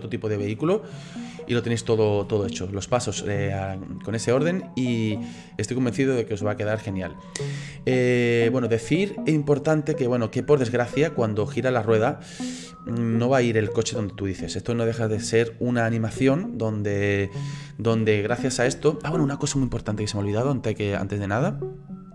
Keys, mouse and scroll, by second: 3.1 space, 4.7-10.6 drag, 11.0-12.3 middle drag, 12.3-15.3 drag, 16.2 space, 18.1 space.